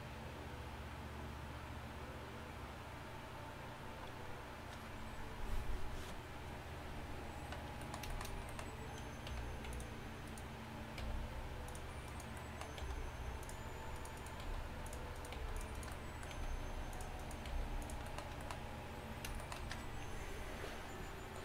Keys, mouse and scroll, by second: 9.4 r, 11.1 g, 12.9 g, 14.5 g, 15.4 g.